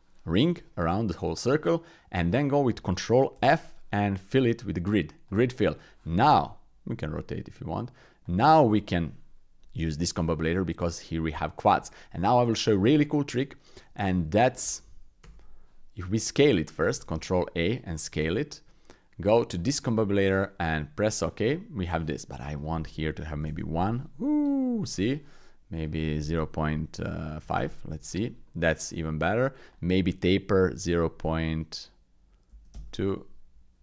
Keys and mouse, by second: 3.3 ctrl+f, 7.1-8.2 drag, 11.0 click, 11.7 Tab, 12.5 click, 13.1 shift+click, 13.3 click, 14.6 ctrl+a, 17.0 ctrl+a, 18.2 shift+a, 22.5-23.5 drag, 24.6 click, 25.9-27.7 drag, 28.4 click, 29.7-32.8 drag.